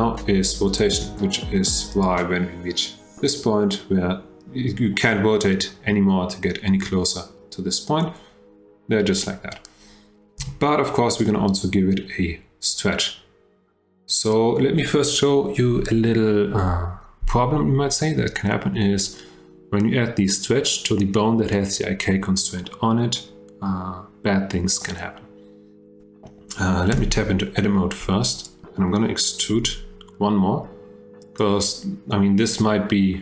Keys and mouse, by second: 10.4 g, 14.2 click, 26.9 Tab, 28.3 click, 29.5 e.